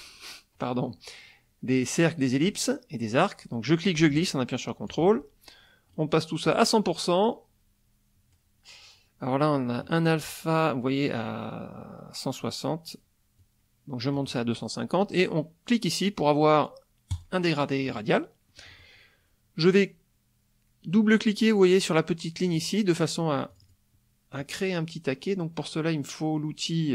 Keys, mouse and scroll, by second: 3.7-5.1 drag, 5.9 click, 6.4 click, 13.4-14.3 drag, 17.1 click, 18.6 middle click, 18.6-19.0 scroll up 1, 22.4 click, 23.5 click.